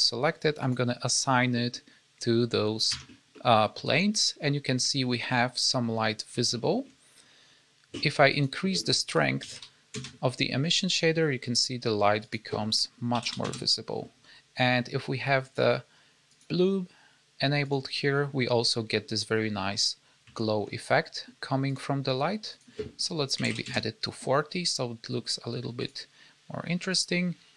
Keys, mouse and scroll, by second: 0.5 click, 1.5 middle click, 2.9 Tab, 3.2 middle click, 6.0 scroll up 4, 6.5 shift+middle click, 7.1-8.2 scroll up 2, 8.2 click, 12.2 click, 15.3 click, 16.2 click, 17.6 click, 18.9-20.1 scroll down 5, 20.2 shift+middle click, 21.6 click, 22.4 click, 25.7 click.